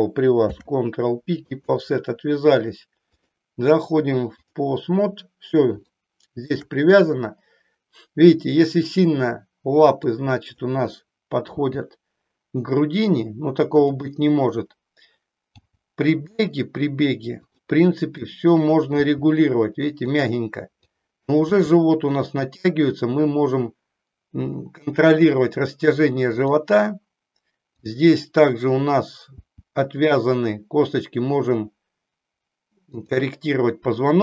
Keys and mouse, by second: 0.4 ctrl+p, 3.0 click, 5.9 shift+middle click, 10.0 click, 11.5 g, 15.6 g, 18.3 click, 18.9 g, 20.9 click, 21.5 g, 26.4 click, 29.4 g, 32.9 click.